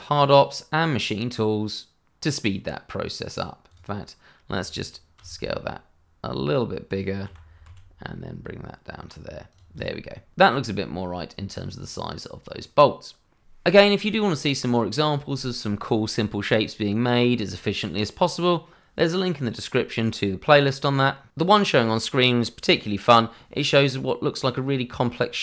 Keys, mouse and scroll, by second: 0.0 shift+middle click, 0.4 scroll down 1, 0.7 middle click, 3.8 click, 5.1 s, 6.8 click, 7.2 g, 7.6 z, 9.5 click, 9.8 double click, 10.1 middle click.